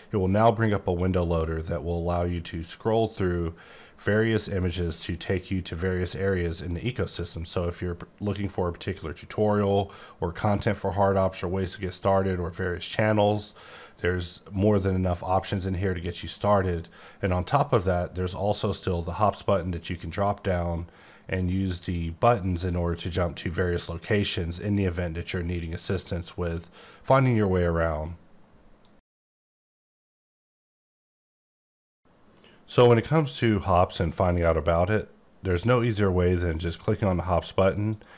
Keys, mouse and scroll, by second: 2.3-4.0 scroll up 9, 4.0-4.5 scroll up 2, 4.5-5.8 scroll down 8, 5.8-8.1 scroll up 10, 8.1-9.6 scroll down 2, 9.6-10.3 scroll down 2, 10.3-10.6 scroll down 1, 11.2-12.3 scroll down 2, 12.3-12.7 scroll down 1, 14.6 scroll down 9, 16.1 click, 17.7 click, 19.9 click, 37.9 click.